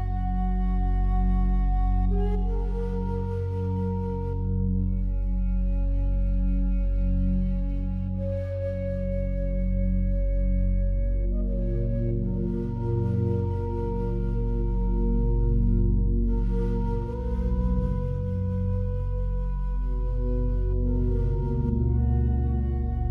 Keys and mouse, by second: 0.7-1.6 drag, 2.6 click, 3.1 click, 3.4 click, 6.3 click, 8.4-9.2 drag, 11.9-12.7 drag, 14.4-16.2 drag, 16.5-20.1 alt+drag, 21.3-22.6 drag.